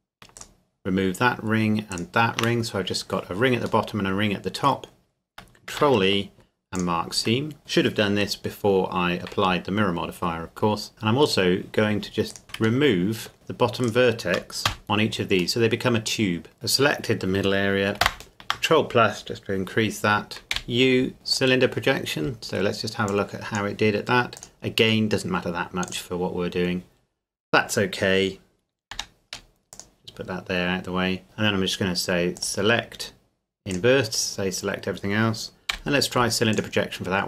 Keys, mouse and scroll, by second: 0.4 alt+shift+right click, 3.9 middle click, 5.7 ctrl+e, 6.7 click, 10.9 middle click, 11.3 right click, 12.3 shift+right click, 12.9 shift+middle click, 13.3 shift+right click, 14.7 x, 14.8 click, 15.6 middle click, 16.5-17.7 scroll down 1, 18.5 ctrl+KP_Add, 20.5 u, 21.3 click, 26.5-27.4 scroll down 1, 27.4-28.0 scroll up 1, 28.9 g, 29.7 click, 30.2-31.2 scroll down 1, 31.2 middle click, 32.4 click, 35.7 u, 36.5 click.